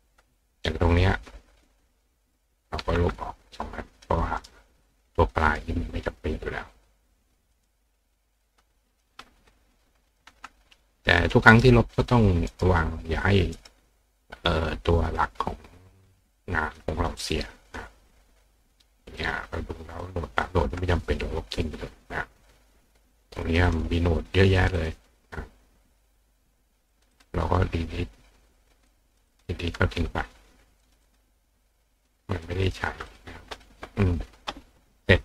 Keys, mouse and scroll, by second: 0.9 click, 1.7 click, 4.1 click, 4.4 right click, 5.3 click, 7.6 click, 8.4 click, 9.5 click, 11.2 click, 11.5 right click, 12.5 right click, 13.6 right click, 14.6 click, 16.7 click, 17.2 click, 17.7 click, 19.2 click, 20.0 click, 23.5 click, 23.7 click, 24.6 click, 24.8 click, 26.9 click, 27.2 click, 28.9 click, 29.3 click, 30.8 click, 31.1 click, 32.5 click, 32.7 click, 33.1 click.